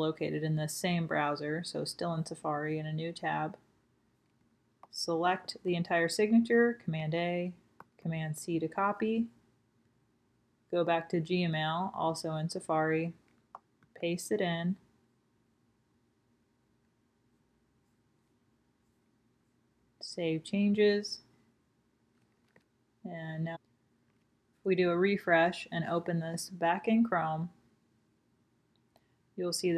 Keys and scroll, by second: 1.9 super+v, 2.5 Return, 8.1 super+a, 10.6 super+c, 16.6 super+v, 25.6-26.3 typing, 26.3 Return.